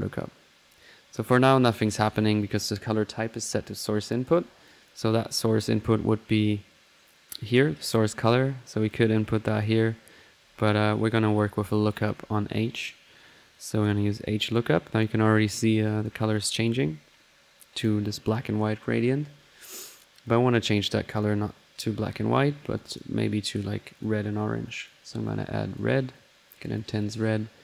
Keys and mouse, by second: 4.7-5.0 drag, 5.1 middle click, 5.3 click, 8.2-8.9 middle drag, 8.9-9.7 drag, 11.9 ctrl+click, 12.8 click, 13.8 click, 14.8 click, 15.9 click, 17.6 click, 20.2 click, 21.1 click, 22.0-22.6 drag, 22.8 click, 24.0-24.3 drag, 24.7-26.1 drag, 26.1-27.1 drag.